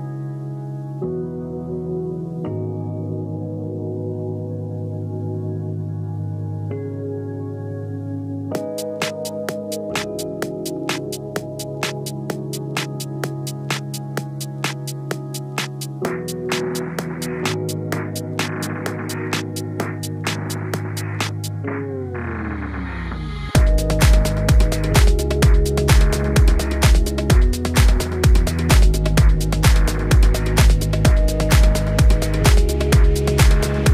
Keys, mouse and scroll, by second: 0.2 click, 0.4-1.0 scroll up 7, 1.0 click, 1.6-2.3 scroll up 1, 2.3-5.6 typing, 6.4 click, 7.1 i, 7.6 e, 8.6 scroll down 3, 8.9 click, 9.4 Tab, 9.5 scroll up 3, 9.6-10.2 scroll down 2, 9.8 click, 10.2 scroll up 1, 10.3 scroll down 1, 10.5 Tab, 10.6 Tab, 11.0 click, 11.5 alt+h, 11.9 click, 12.3 s, 12.6 s, 13.0-13.4 scroll up 3, 13.4 click, 13.6-13.9 scroll down 2, 13.9 g, 14.8 click, 15.0 click, 15.2-15.6 scroll up 5, 15.6 click, 15.8-16.1 scroll down 1, 16.1 click, 16.9 g, 18.5 s, 19.2 scroll up 2, 19.5 click, 19.8-20.1 scroll down 1, 20.1 click, 20.3 scroll up 1, 20.4-20.9 scroll down 1, 20.9 click, 21.8 scroll down 2, 22.0 scroll up 1, 22.3 ctrl+s, 22.5 scroll down 1, 22.7 click, 22.8 scroll up 1, 22.9 click, 23.7 click, 24.1 h, 24.3 scroll up 4, 24.6 shift+a, 25.9 scroll up 1, 26.0-26.3 scroll down 1, 26.3 click, 26.5 s, 27.1 scroll down 3, 27.4 alt+h, 27.5-27.8 scroll up 2, 27.8 click, 28.3 click, 28.7 s, 29.8 drag, 30.1 click, 30.3-30.7 scroll down 2, 30.7 g, 32.8 s, 33.2 s.